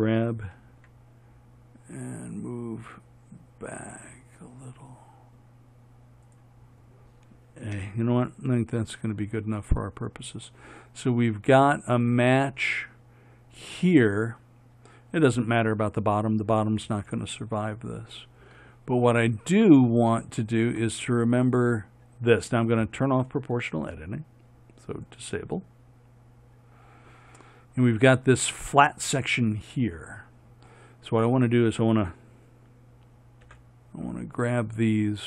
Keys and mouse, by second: 8.0 a, 33.7 b.